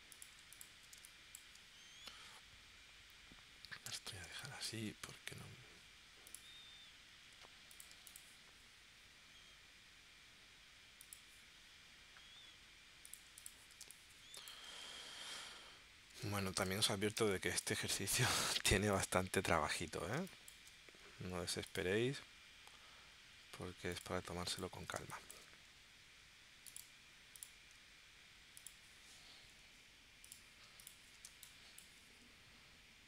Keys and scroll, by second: 1.0 space, 4.2 space, 13.8 space, 16.2 space, 17.2 space, 18.6 space, 20.2 space, 25.0 space, 31.3 space.